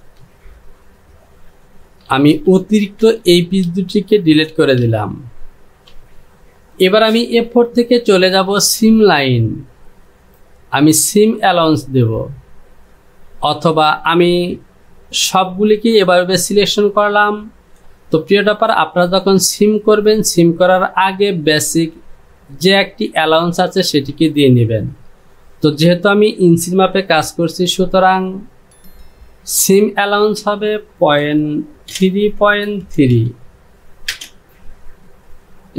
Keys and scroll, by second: 0.4 j, 2.9 shift+z, 5.9 j, 30.1 Down, 31.3 KP_Decimal, 32.4 d, 33.2 n, 34.1 Return.